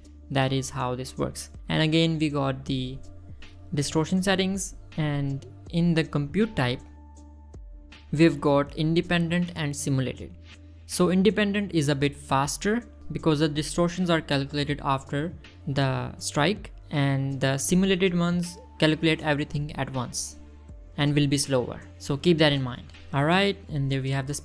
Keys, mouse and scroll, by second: 1.9 middle click, 2.0 scroll down 1, 8.2-11.4 drag, 17.3-17.9 drag, 23.0-23.9 drag.